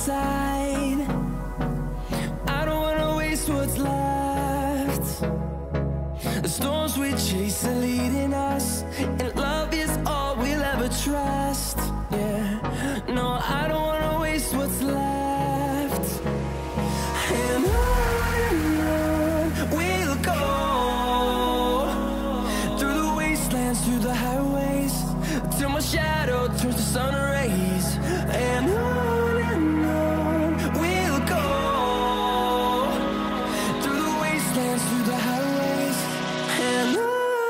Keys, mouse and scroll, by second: 1.6-2.0 scroll up 1, 2.6 click, 3.0-3.8 scroll down 1, 3.0 typing, 6.2 click, 10.0 scroll up 1, 10.6 click, 11.2-11.8 scroll up 1, 11.8 click, 12.4-12.9 scroll down 1, 14.2-16.0 scroll up 1, 16.7 click, 17.8 F10, 18.7 click, 21.4 Delete, 22.5 click, 25.4 ctrl+z, 27.7 click, 27.8 F10, 28.7 click, 32.8 Delete, 33.5 click, 33.7 click, 34.2 Delete, 34.6 click, 35.2 Delete, 36.2 click, 36.6 Delete, 37.1 click, 37.3 click.